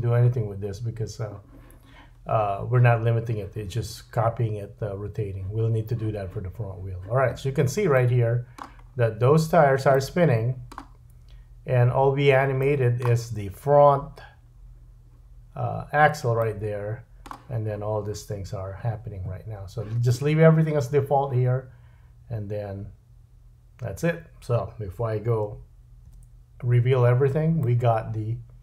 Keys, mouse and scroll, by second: 2.4-10.2 drag, 7.4-7.9 scroll down 3, 7.9 middle click, 8.8-9.5 scroll up 3, 9.5 scroll down 1, 9.9 middle click, 10.7-12.6 scroll down 1, 12.6 middle click, 16.4 middle click, 26.1 /, 27.6 middle click.